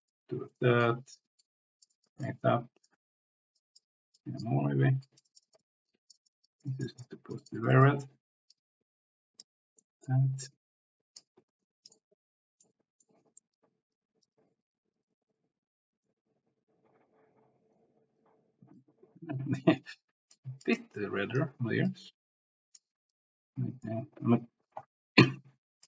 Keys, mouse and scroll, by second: 0.5 click, 1.4 click, 2.6 click, 3.6 click, 4.2 click, 5.0 click, 6.0 click, 6.5-7.7 drag, 8.5 click, 9.8 middle click, 10.4 click, 11.6 ctrl+z, 11.8 click, 12.6 middle click, 13.6 click, 14.5 click, 14.5 c, 15.4 click, 16.0-17.8 middle drag, 18.2 click, 19.3 ctrl+z, 20.3 click, 20.8 click, 21.8 click, 22.2 c, 23.1 click, 24.3 ctrl+z, 25.2 click.